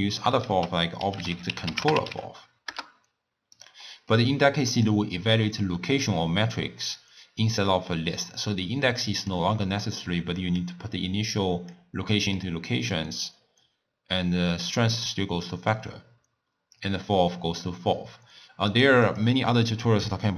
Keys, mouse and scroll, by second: 0.4 ctrl+a, 3.9-4.7 middle drag, 4.7-7.8 drag, 8.2 click, 10.6 click, 12.1 middle click, 12.9 drag, 15.5-16.8 middle drag, 16.8 drag, 18.7 drag, 19.1 click, 20.0-20.3 drag.